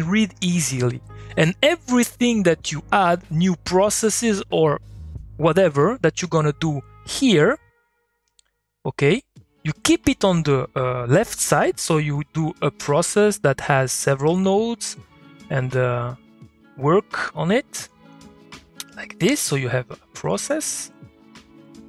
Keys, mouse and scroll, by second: 7.1 click.